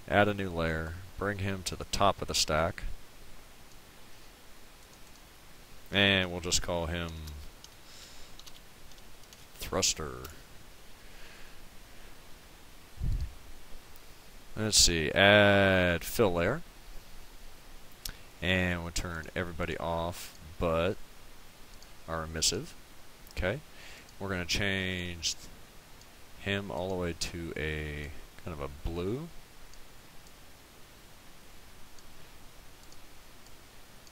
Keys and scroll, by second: 7.1-9.8 typing, 10.3 Return.